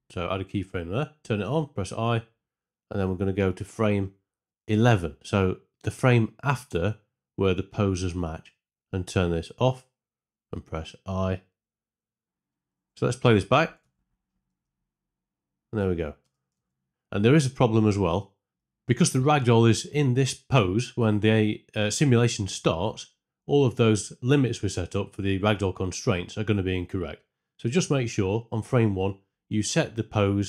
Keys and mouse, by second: 1.8 i, 3.7-4.8 drag, 4.8 Right, 9.5 click, 12.2 ctrl+space, 13.8 shift+Left, 14.4 space, 16.2 space, 16.5 shift+Left, 28.8 click, 29.2 Tab, 29.5 a, 30.1 ctrl+c.